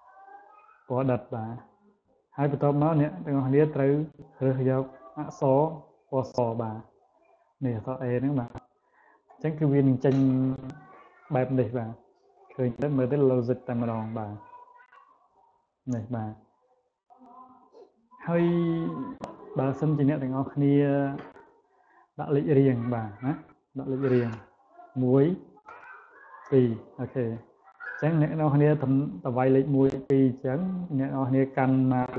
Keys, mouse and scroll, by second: 0.7 click, 3.2 click, 7.1 click, 8.7 click, 12.5 click, 13.0 click, 14.0 click, 14.5 click, 14.9 click, 15.2 click, 15.6 click, 16.8 click, 22.7 1, 25.5 2, 29.6 click, 31.9-32.1 drag.